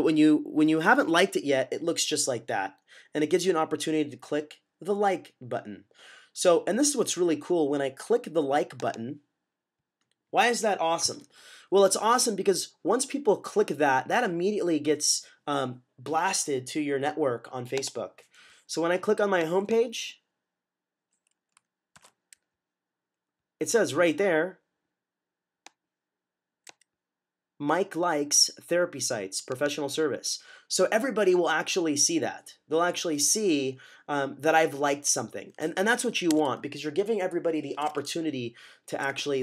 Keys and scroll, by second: 21.8 -, 36.2 w, 37.7 typing.